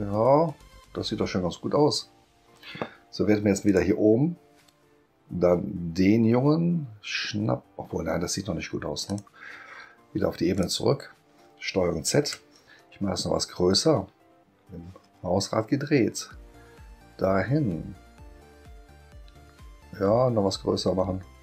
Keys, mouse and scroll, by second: 3.6 click, 9.1 click, 10.5 click, 12.0 ctrl+z, 13.9-14.8 scroll up 2, 21.1 middle click, 21.1-21.4 scroll up 1.